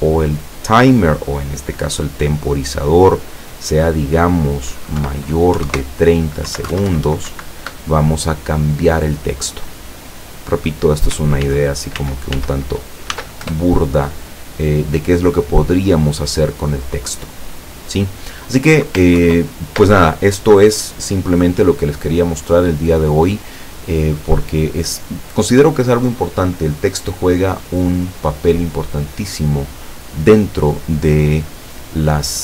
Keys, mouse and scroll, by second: 1.9 click, 2.7 click, 4.0 click, 5.0 Delete, 5.6 KP_3, 5.7 KP_0, 6.5 Down, 6.8 ctrl+Left, 7.3 ctrl+Right, 11.5 ctrl+z, 13.1 ctrl+s, 13.5 ctrl+Return, 19.2 ctrl+Home.